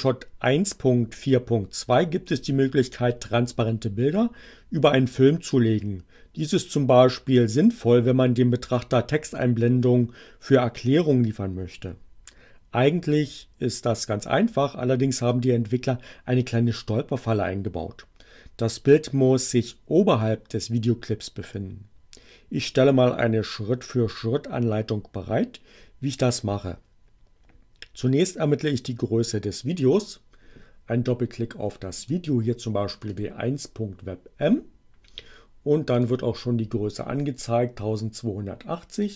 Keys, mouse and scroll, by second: 32.0 click, 32.9 click, 35.9 click, 39.0 click.